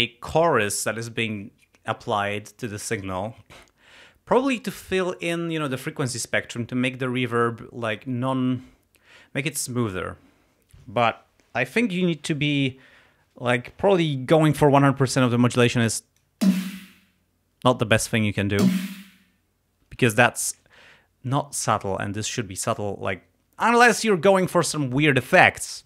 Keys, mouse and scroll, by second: 15.6 click, 16.5 space, 18.0 click, 18.6 space, 19.9 space.